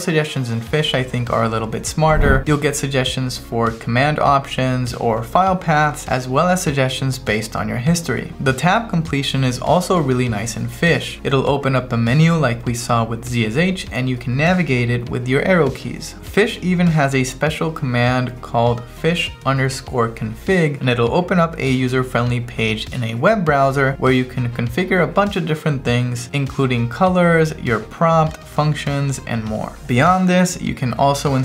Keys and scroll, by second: 2.2-3.1 typing, 3.8 Right, 4.9 q, 5.2 Right, 6.0 v, 6.6 Right, 8.3 space, 8.6 Tab, 10.5 Down, 11.1 Right, 11.4 Down, 11.7 Up, 12.2 Right, 12.5 Down, 13.3 Left, 13.6 Down, 16.0-18.1 typing, 18.3 Return, 20.7 Return, 29.7 r, 31.0 Right.